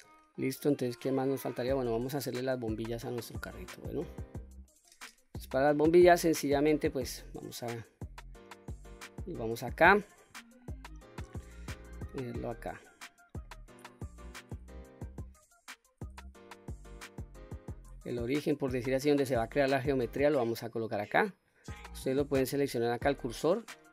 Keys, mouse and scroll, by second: 0.3-1.5 middle drag, 1.9-2.7 scroll up 2, 2.2-2.7 middle drag, 3.0-3.6 scroll up 2, 3.6-4.5 middle drag, 5.3-5.6 scroll down 1, 5.6 middle drag, 6.5-7.2 scroll down 1, 8.4 scroll down 1, 10.5 shift+right click, 12.0 shift+right click, 12.7-13.3 middle drag, 13.5-15.2 scroll up 2, 16.3-17.6 shift+middle drag.